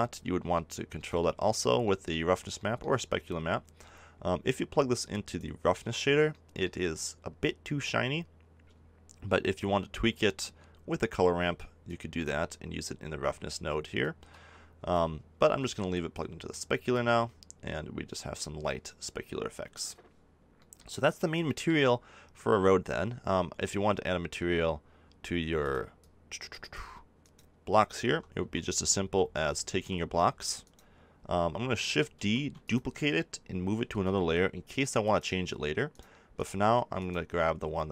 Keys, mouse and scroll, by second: 0.5 middle click, 20.5 middle click, 25.5-26.7 middle drag, 26.7 click, 27.2 right click, 28.0 Tab, 28.3 a, 28.9 Tab, 29.7 a, 30.6-31.6 right drag, 33.8 shift+m, 35.9-37.9 drag.